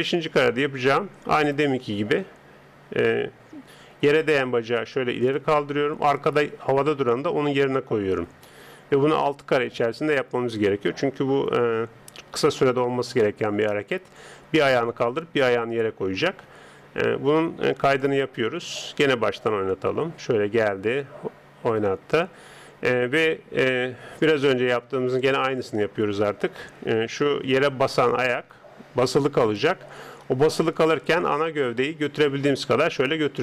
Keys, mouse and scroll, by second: 1.4 right click, 4.0 g, 6.0 right click, 6.8 g, 17.9-21.4 drag, 27.8 d, 28.0 click, 29.6 d, 29.6 d, 31.2 right click, 31.2 d, 31.9 click, 32.9 middle click.